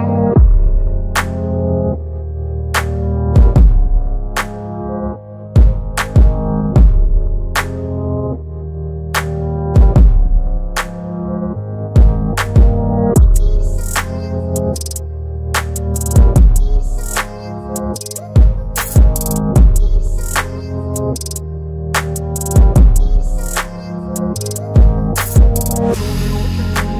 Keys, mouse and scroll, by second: 2.3 click, 2.3-6.3 drag, 7.5 Delete, 9.3 ctrl+d, 12.6-16.3 drag, 17.0 Delete, 18.5 ctrl+d, 20.2 alt+scroll up 1, 21.4-22.7 drag, 23.0 Delete, 24.0-26.8 drag.